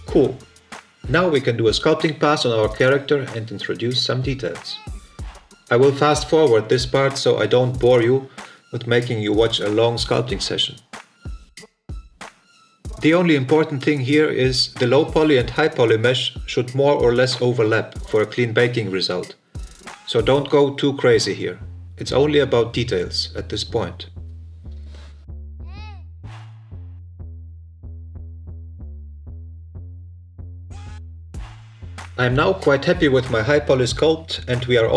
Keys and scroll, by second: 2.0 Tab, 8.7 Delete, 8.8 Tab, 9.0 shift+f, 9.1 ctrl+z, 11.5 f, 13.0 f, 17.1 f, 17.6 f, 18.7 f, 20.6 f, 21.4 f, 22.5-24.9 typing, 25.9 f, 27.2 f, 28.3 shift+f, 29.1 shift+f, 31.0 f.